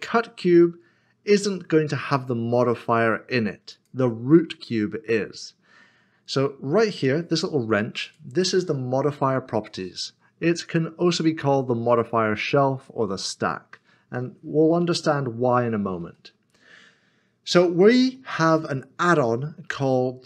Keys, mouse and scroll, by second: 3.7 click, 8.0 click, 16.1 click, 16.3 middle click.